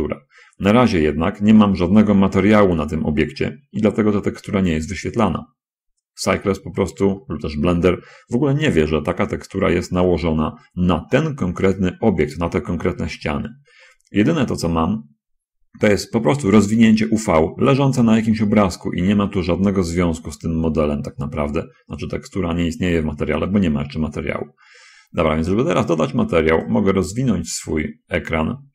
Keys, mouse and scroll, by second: 2.0 middle click, 3.0 middle click, 3.7 middle click, 4.1-6.6 middle drag, 6.7 middle click, 14.6-15.4 scroll down 1, 15.6 scroll up 1, 26.8-28.7 drag.